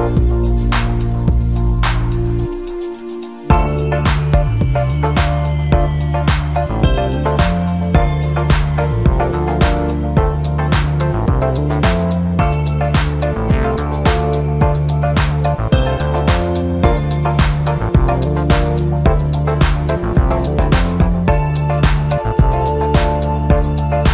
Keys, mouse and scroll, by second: 7.0 KP_7, 8.6-10.3 drag, 10.3-11.5 scroll up 1, 11.5-15.4 drag, 15.4 ctrl+KP_4, 15.6-16.5 ctrl+KP_4, 17.4-18.0 scroll down 2, 18.0-19.6 scroll down 1, 21.0-24.1 drag.